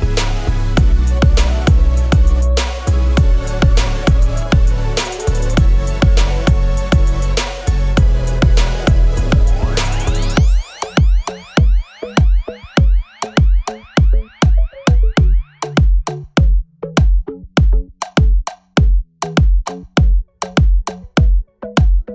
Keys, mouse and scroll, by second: 6.8-7.2 scroll up 1, 7.2 scroll, 8.0-8.5 scroll, 9.6-10.0 scroll, 10.5 ctrl+shift+p, 11.5 double click, 13.2 scroll down 1, 18.8 double click.